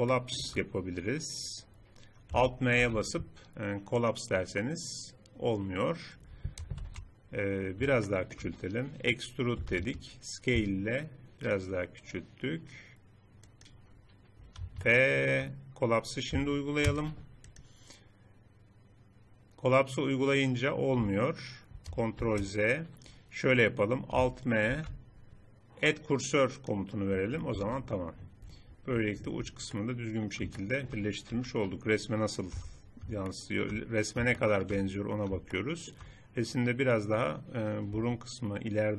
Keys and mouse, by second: 2.9 alt+m, 6.8 ctrl+z, 9.6 e, 10.6 s, 14.3-16.9 drag, 16.9 alt+m, 22.3 ctrl+z, 24.7 alt+m, 27.6 Tab, 31.3 KP_3, 32.6 z, 38.0 Tab.